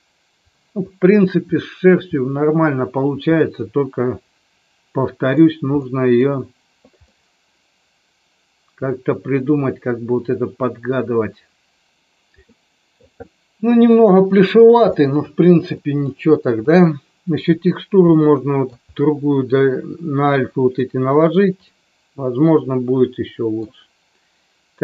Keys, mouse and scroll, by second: 3.4-5.4 middle drag, 5.7-6.1 middle drag, 7.0-11.9 middle drag, 12.4-13.0 middle drag, 14.9 middle click, 15.7 middle click, 16.6 click, 18.0 middle click, 21.6-23.5 middle drag.